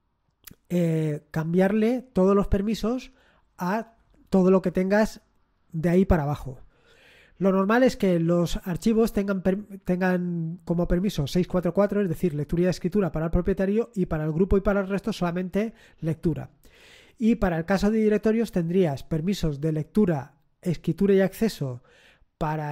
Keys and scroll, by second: 2.0 space.